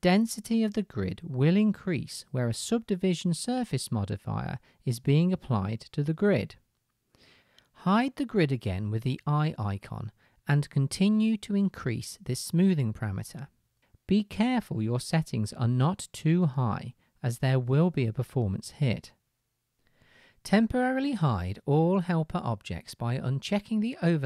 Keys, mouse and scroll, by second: 8.7-12.2 middle drag, 12.2-23.3 drag, 23.3-24.2 middle drag.